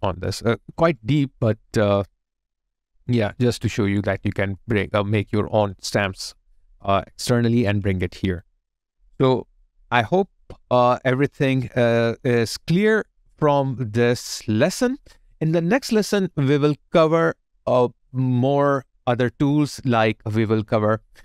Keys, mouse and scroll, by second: 0.9 alt+right click, 2.6 alt+click, 3.2 alt+right click, 3.7 alt+click, 4.3 alt+middle click, 4.7 alt+click, 10.2 alt+click, 13.2 alt+middle click, 13.5 alt+click, 14.1 alt+right click, 14.6 alt+click, 15.3 alt+right click, 18.1 alt+click.